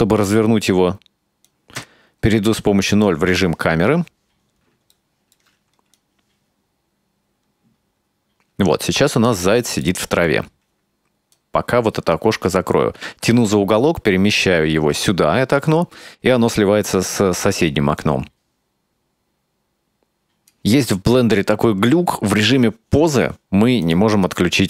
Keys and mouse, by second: 1.9 KP_0, 5.1-5.5 shift+middle drag, 6.0-8.9 drag, 10.0-10.4 shift+middle drag, 11.4-15.8 drag, 18.1-20.6 drag, 23.9 click, 24.3 click.